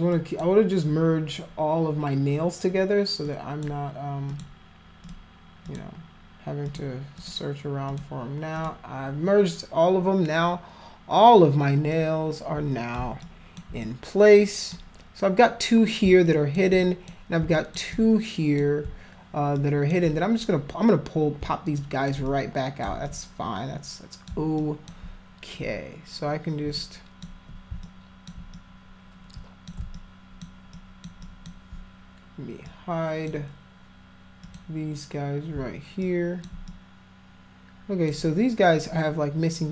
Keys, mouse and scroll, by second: 0.2 click, 3.3 click, 4.3 click, 5.1 click, 5.7 click, 6.7 click, 7.2 click, 7.9 click, 8.6 click, 12.0 click, 13.2 alt+click, 13.9 click, 16.3 alt+click, 16.8 click, 17.6 alt+click, 18.0 click, 19.6 alt+click, 21.8 alt+click, 22.3 click, 23.1-24.3 drag, 24.6 alt+click, 26.8 ctrl+click, 27.9 alt+click, 28.6-29.7 drag, 30.0 alt+click, 30.8 alt+click, 31.2 alt+click, 32.7 click, 34.5 click, 36.1 alt+click, 36.7-38.1 drag.